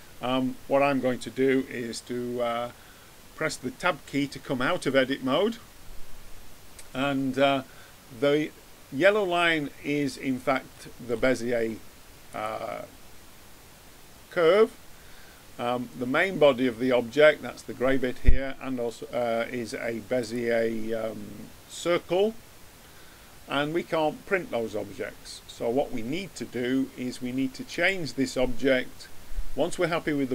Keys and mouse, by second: 4.9 Tab, 10.2-12.2 middle drag, 12.2-14.2 drag, 20.1-22.1 drag, 27.6-29.5 drag.